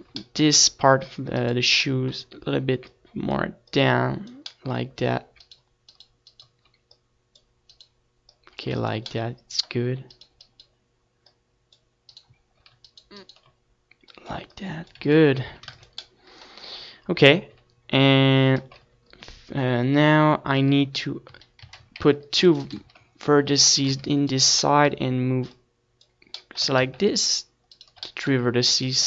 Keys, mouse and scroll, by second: 0.9 click, 2.2-5.8 drag, 2.2-3.5 middle drag, 2.2-5.8 right drag, 5.4 middle click, 10.5 ctrl+s, 10.9 Tab, 11.1 ctrl+s, 13.8 Tab, 15.4 a, 16.0 a, 16.4 a, 16.7 ctrl+r, 17.3-18.9 right drag, 17.3 a, 17.8 ctrl+r, 18.4 a, 20.7 ctrl+z, 24.1 right click, 24.6-27.2 middle drag, 26.1-28.1 drag, 26.1-27.2 right drag, 28.9 ctrl+s.